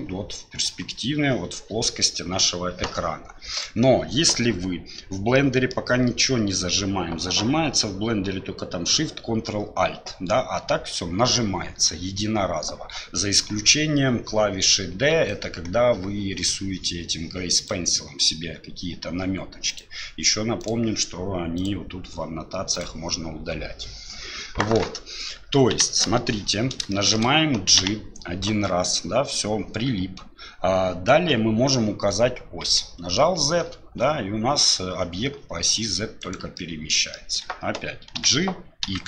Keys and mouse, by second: 5.3 middle click, 15.1-18.1 d, 15.3-18.1 drag, 19.7 click, 21.6 click, 22.7 click, 25.7 KP_1, 26.9 shift+drag, 27.8 g, 36.5-36.9 middle drag, 37.1 shift+middle click, 38.1 g.